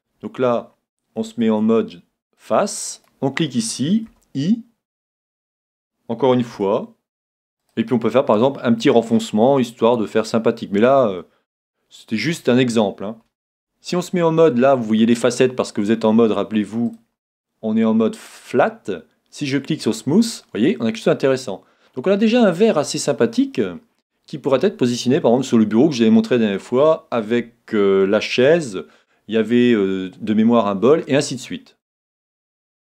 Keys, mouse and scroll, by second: 1.4 ctrl+Tab, 3.0-4.9 right drag, 4.1 i, 5.3-7.2 drag, 7.7-9.4 drag, 8.5-10.3 middle drag, 10.1-11.9 drag, 11.2-12.9 middle drag, 13.5 Tab, 14.9-16.9 middle drag, 16.9-18.6 drag, 20.0-21.8 drag, 20.4-22.4 middle drag, 23.0-23.4 scroll down 1, 23.4-25.2 middle drag, 31.4-32.9 middle drag.